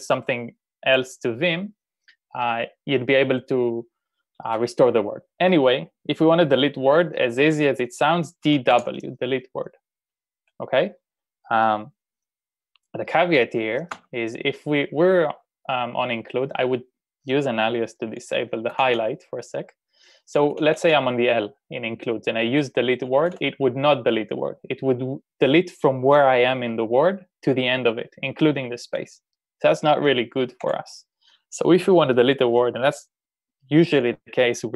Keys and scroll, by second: 8.3-9.2 typing, 14.0 u, 18.8 typing, 20.3-21.0 typing, 23.0-23.8 typing, 30.7 u.